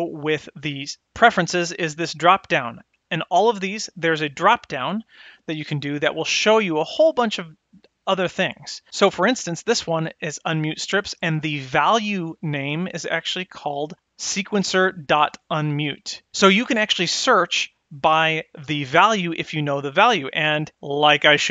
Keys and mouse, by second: 4.1 click, 17.3-21.5 drag.